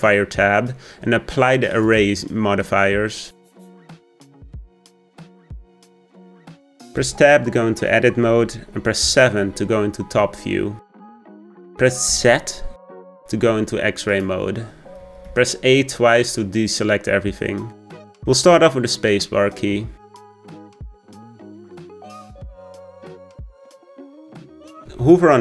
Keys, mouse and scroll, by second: 1.8-7.0 drag, 7.0 Tab, 9.0 KP_7, 10.2-12.1 scroll up 2, 12.1 z, 15.0 a, 15.2 a, 16.5-17.3 scroll up 1, 17.6-19.4 shift+middle drag, 19.4-22.3 scroll up 1.